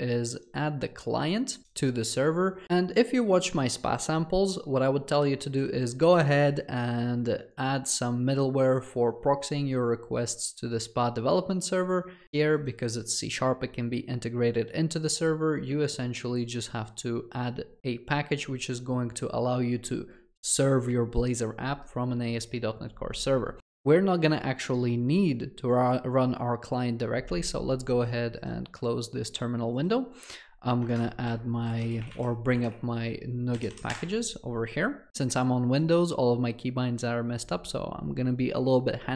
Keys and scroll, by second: 28.1 ctrl+shift+t, 31.1 ctrl+shift+t, 34.1 alt+shift+7.